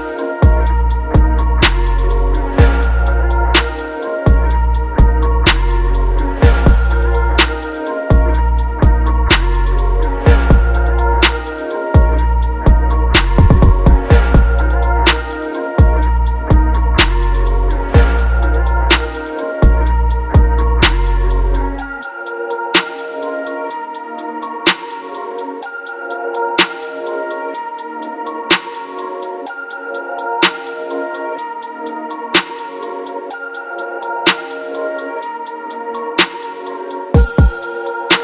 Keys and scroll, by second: 9.7 ctrl+t, 11.0 Return, 16.2 ctrl+t, 16.5 ctrl+t, 20.4 Return, 21.8-22.6 typing, 26.9 ctrl+t, 28.7 Return.